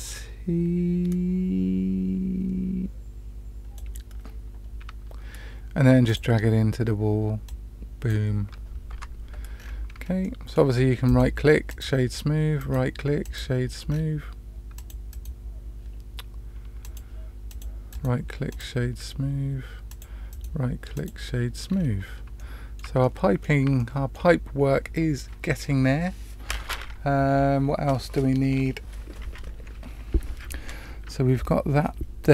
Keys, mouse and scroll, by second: 6.0 click, 7.4-8.0 drag, 8.9 Tab, 9.5 scroll down 1, 9.6 scroll up 1, 9.7-10.2 scroll down 3, 10.2-10.5 middle drag, 11.0 right click, 12.5-13.3 right drag, 13.8-14.7 scroll down 2, 14.7 click, 15.1-15.9 right drag, 16.8 click, 17.4 click, 17.9-18.5 right drag, 19.8 click, 20.3 right click, 21.6-22.0 scroll down 2, 22.3-22.8 shift+middle drag, 23.0-23.4 middle drag, 23.7-24.1 shift+middle drag.